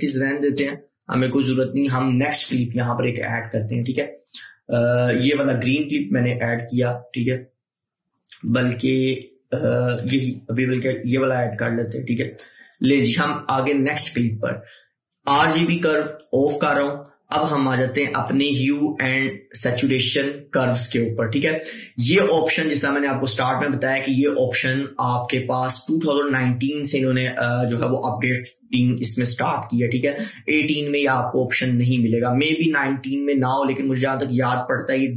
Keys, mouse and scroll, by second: 3.9 ctrl+z, 4.2-9.2 drag, 10.1 Delete, 11.0-23.1 drag.